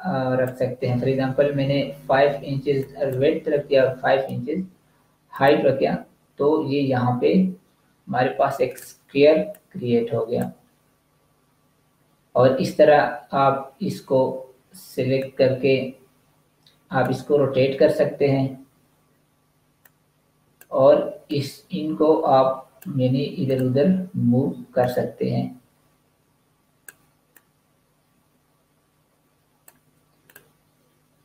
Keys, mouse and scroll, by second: 1.9 5, 2.7 click, 3.5 5, 5.3 click, 8.5 click, 15.1 click, 19.8 click, 27.3 click.